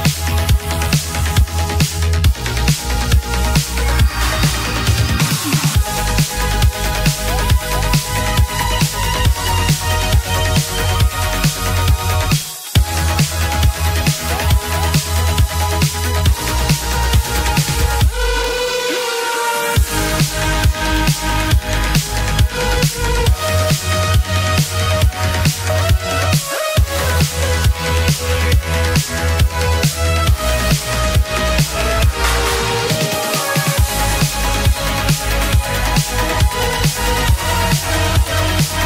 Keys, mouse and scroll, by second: 5.5-7.9 scroll up 18, 19.0-20.4 typing, 20.8 Return, 33.9-34.6 scroll down 5, 34.9-37.9 scroll down 2.